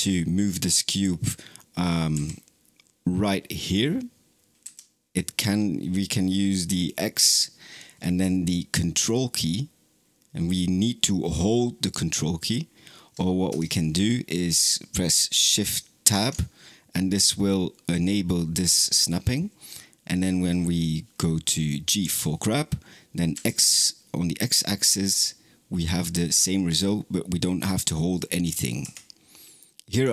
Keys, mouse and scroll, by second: 2.0 g, 15.9 shift+Tab, 21.9 g, 29.8-30.1 drag.